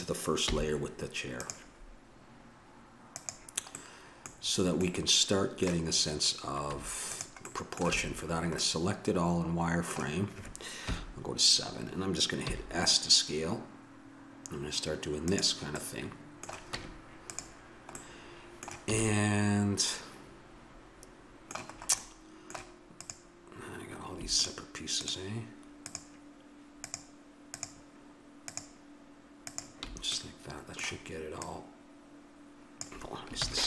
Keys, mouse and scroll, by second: 0.4 m, 3.1 click, 3.9 middle click, 6.7 Tab, 7.9 a, 10.8 KP_7, 12.4 s, 15.9 middle click, 16.7 Tab, 18.9 a, 20.8-22.1 middle drag, 23.0-24.4 right drag, 24.4-31.3 drag, 31.5-33.0 drag, 33.5 ctrl+z.